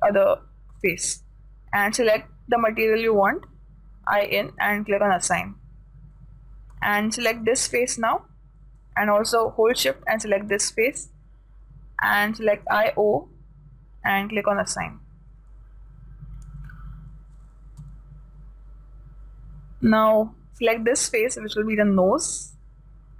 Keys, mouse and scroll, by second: 3.5-5.1 drag, 5.2 click, 5.4-7.2 drag, 7.8 right click, 10.6 right click, 13.0-16.6 drag, 16.0 a, 18.2 a, 21.2 right click.